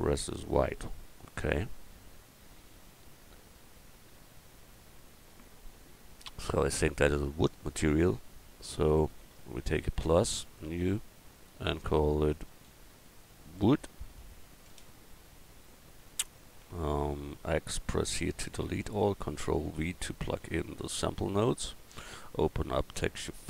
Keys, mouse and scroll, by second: 14.2 o, 18.1 x, 19.6 ctrl+v, 20.6-22.5 middle drag, 23.4 click.